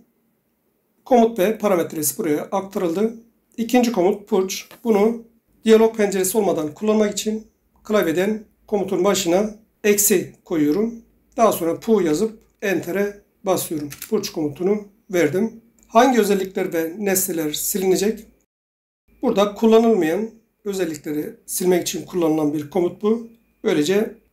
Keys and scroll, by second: 8.1 -, 12.2 Right, 14.0 Return.